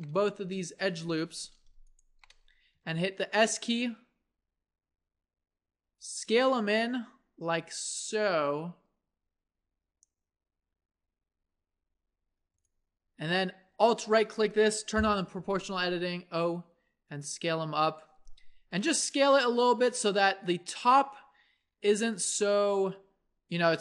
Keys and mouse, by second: 1.2 ctrl+z, 2.7 s, 13.9-16.0 drag, 15.0 o, 16.0 s, 20.0-22.1 middle drag, 22.1-23.8 drag, 22.6 s.